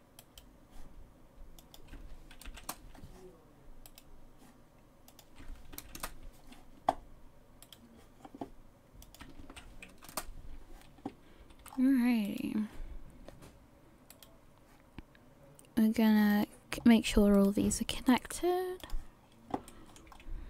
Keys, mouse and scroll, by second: 0.4 right click, 1.6 click, 4.1 right click, 5.1 click, 7.8 right click, 9.0 click, 11.4 a, 11.7-12.4 scroll up 5, 12.4 right click, 14.2 right click, 16.3 click, 16.8-17.5 scroll down 2, 17.5 right click, 18.8 click, 19.2 scroll down 2, 19.7 shift+middle click, 20.1-20.4 scroll up 2.